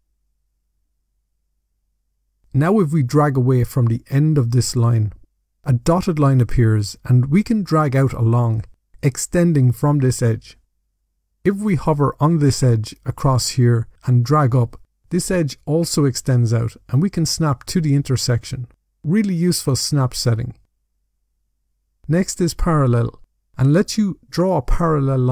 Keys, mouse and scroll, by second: 1.3 click, 16.7 click, 19.2 click, 21.2 click, 21.9 click, 24.2 click.